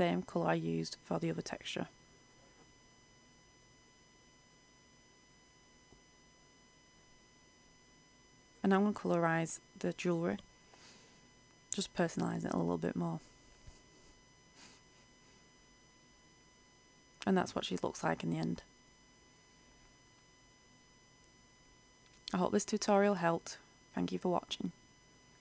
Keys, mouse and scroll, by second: 15.6 F8, 19.9-25.4 drag.